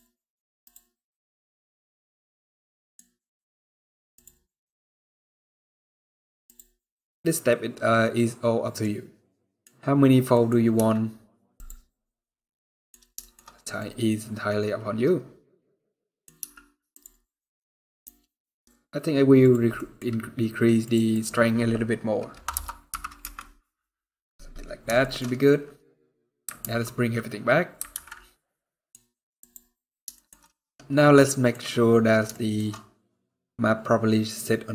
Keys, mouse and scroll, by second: 2.0 scroll down 1, 2.1 middle click, 2.7 scroll up 1, 3.9 click, 6.2 click, 6.6 middle click, 9.1 middle click, 10.5 z, 12.0 middle click, 12.9 shift+middle click, 13.1 scroll up 4, 13.5 middle click, 16.1 z, 17.0 scroll down 4, 17.1 middle click, 17.8 scroll up 2, 19.1 click, 19.5 middle click, 20.5 click, 24.1-24.7 scroll down 3, 24.7 shift+middle click, 25.0 scroll up 2, 25.9 scroll down 1, 25.9 scroll down 1, 26.5 alt+h, 27.8 alt+a, 28.1 middle click, 28.7 scroll up 2, 29.1 click, 29.9 shift+middle click, 30.1 middle click, 31.3-31.7 scroll up 2, 32.1 shift+middle click, 32.3 shift+scroll down 1, 32.4 middle click.